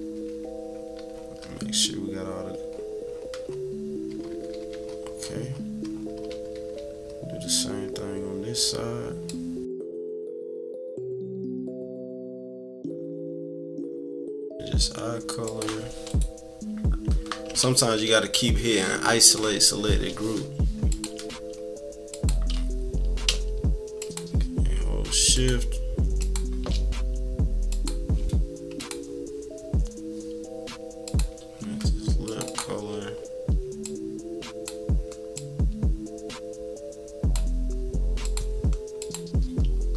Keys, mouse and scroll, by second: 0.0 =, 0.2 =, 0.6-2.7 scroll down 8, 1.0 =, 2.7-3.9 scroll up 8, 4.3 -, 4.5 -, 4.7-5.6 scroll up 4, 4.9 -, 5.9 scroll down 1, 6.2 =, 6.5 =, 6.7 scroll down 1, 9.2-10.3 drag, 10.5 click, 10.7-11.8 drag, 12.0 click, 12.2 click, 13.0 click, 13.8 -, 14.0 scroll down 2, 14.3 =, 14.4 scroll up 2, 15.4 click, 16.0 click, 20.9 click, 22.1 click, 24.0-25.4 shift+drag, 26.2 shift+click, 27.7 click, 28.8 click, 31.0 click, 32.2 click, 33.8-34.8 drag, 35.3-37.5 drag, 38.2 click, 39.0 click.